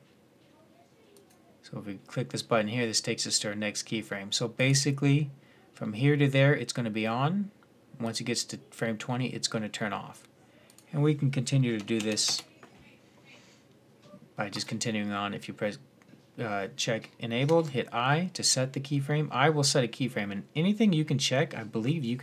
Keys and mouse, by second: 2.9-4.4 middle drag, 7.2 middle click, 10.5-12.5 drag, 14.3 click, 17.2 i.